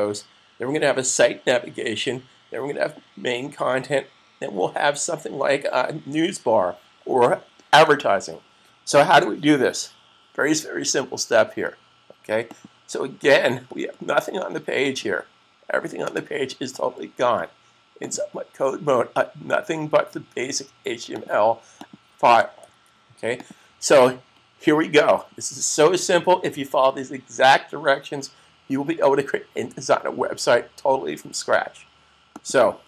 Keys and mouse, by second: 12.3 click, 18.2 click, 21.1 click, 22.5 super+s, 23.3 click, 32.2 click.